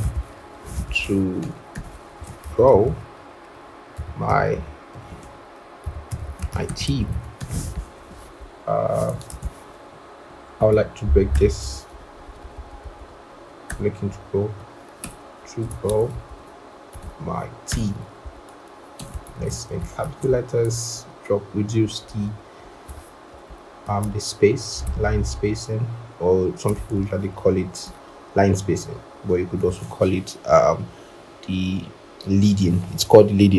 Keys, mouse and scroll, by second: 0.0-2.6 typing, 1.6 Return, 3.9-6.9 typing, 11.8 Return, 12.0 Right, 12.3 Right, 12.6 Right, 12.9 Right, 14.0 Down, 14.9 BackSpace, 16.0 ctrl+Right, 16.2 ctrl+Right, 16.9 ctrl+Left, 18.1 Return, 18.9-19.9 typing, 20.9 alt+Up, 21.7 alt+Up, 22.1 alt+Up, 22.5 alt+Down, 27.7 shift+click.